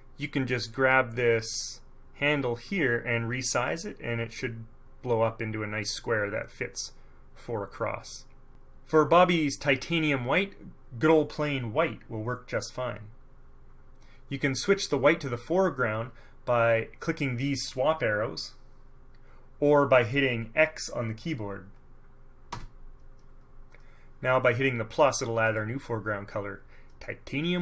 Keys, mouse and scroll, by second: 2.8-4.0 drag, 22.6 Up, 25.6 click.